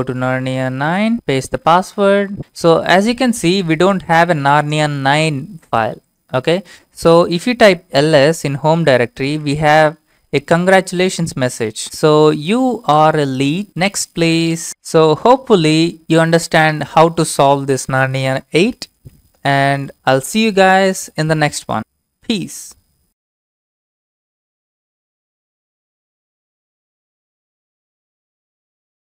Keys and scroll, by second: 0.1 Left, 0.2-1.1 Left, 1.1 Return, 1.1-2.9 typing, 1.8 Return, 7.7-12.3 typing, 11.1 Tab.